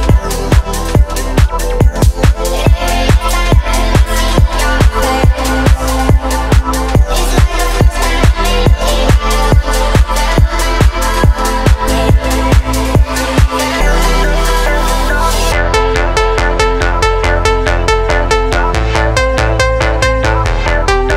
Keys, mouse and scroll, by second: 0.6 middle click, 1.1 shift+middle drag, 1.5-2.0 middle drag, 3.5 ctrl+alt+KP_0, 5.1 v, 6.0-6.8 q, 9.0 click, 9.5 space, 13.9 space, 14.8 click, 17.2 click, 17.8 scroll up 1, 18.3 click.